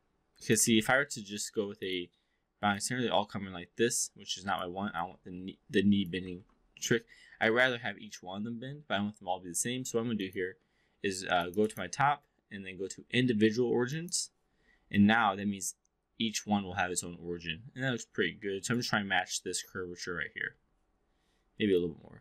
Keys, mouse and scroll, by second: 0.6 ctrl+z, 1.3-1.9 drag, 2.6-4.6 drag, 5.0-6.2 alt+drag, 6.3 ctrl+z, 10.0 click, 11.6-14.1 drag, 15.0-18.8 drag, 21.7-22.2 drag.